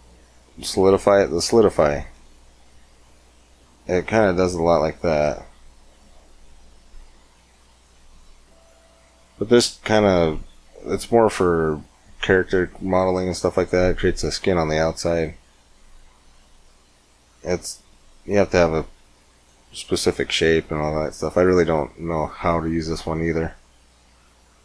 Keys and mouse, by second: 6.2-16.2 drag.